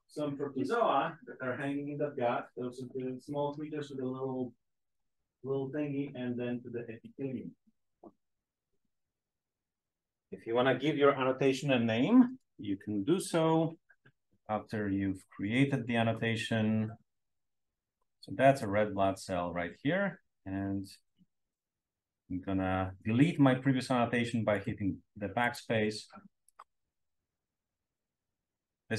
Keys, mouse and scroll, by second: 15.9 click, 16.6-18.0 scroll up 1, 18.5-19.7 drag, 21.4 BackSpace, 24.4 click, 25.3 right click, 26.3 click, 27.3-28.6 drag.